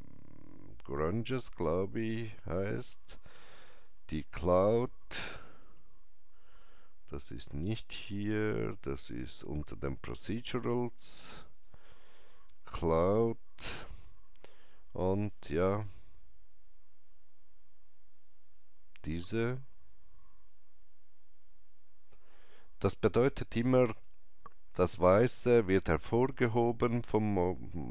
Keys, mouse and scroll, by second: 1.3 click, 1.3 scroll down 1, 2.4 click, 3.5-5.5 typing, 9.2 click, 9.2 typing, 11.6 click, 12.2-13.9 typing.